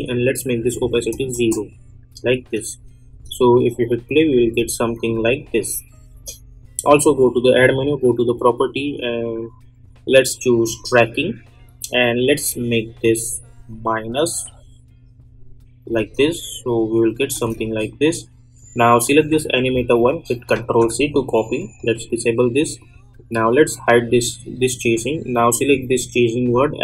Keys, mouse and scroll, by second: 1.3 Return, 2.6 click, 3.1 space, 5.0-7.0 drag, 10.6-16.0 drag, 16.0 space, 18.1-19.0 scroll up 1, 19.0 click, 20.5 ctrl+c, 21.7-26.8 drag.